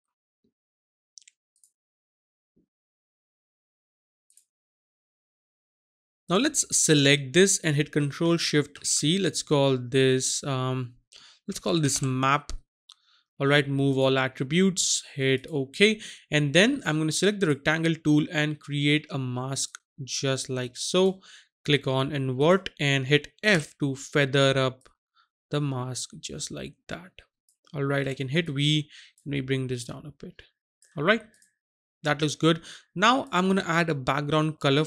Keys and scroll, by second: 8.7 ctrl+shift+c, 11.6-11.9 typing, 23.6 f, 28.0 v.